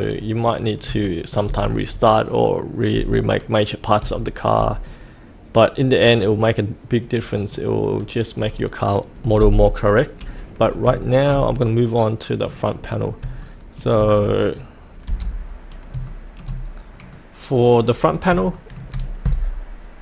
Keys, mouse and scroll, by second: 0.0 scroll down 1, 0.5-0.8 scroll up 1, 1.0 shift+middle click, 1.2 shift+scroll up 1, 3.3-4.0 scroll up 1, 4.2 shift+middle click, 4.8-7.6 middle drag, 7.9-10.8 scroll up 1, 11.0-12.6 shift+middle drag, 12.7-13.2 scroll down 1, 13.4 shift+middle click, 15.1 F8, 16.1 shift+middle click, 17.1 middle click, 18.6 shift+middle click, 19.3-20.0 scroll down 1.